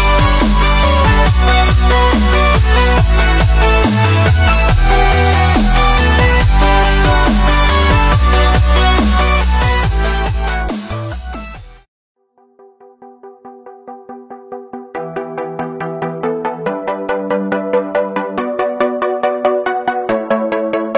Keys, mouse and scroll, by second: 0.5 Tab, 0.9 click, 1.7-2.2 scroll down 2, 2.2 shift+middle drag, 2.4-2.8 scroll up 1, 2.8 shift+middle drag, 3.0 scroll up 1, 3.0-4.9 middle drag, 4.9 drag, 5.1 scroll up 1, 5.1 scroll down 1, 5.3 shift+middle drag, 5.4-6.1 scroll up 5, 6.1-6.5 scroll down 5, 6.2 click, 6.9 click, 8.0 ctrl+z, 8.5 click, 10.6 click, 10.7 scroll down 1, 10.8 scroll up 1, 10.9-11.7 middle drag, 11.7 scroll down 3, 11.9 scroll up 1, 12.0-12.4 middle drag, 12.4 click, 12.8 click, 13.0-13.7 scroll down 2, 13.3 shift+middle click, 13.7 middle click, 14.5 scroll up 2, 14.7 middle click, 14.8 scroll down 2, 15.0 shift+middle drag, 15.1-15.7 scroll up 1, 15.7 shift+a, 17.8 drag, 18.2 s, 19.3-19.7 middle drag, 19.7 click, 20.4-20.8 middle drag, 20.8-20.9 drag.